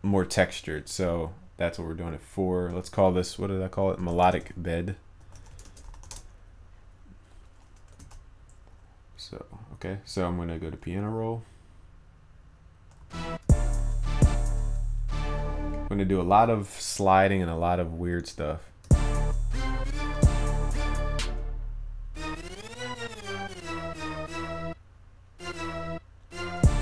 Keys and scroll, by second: 8.0 ctrl+s.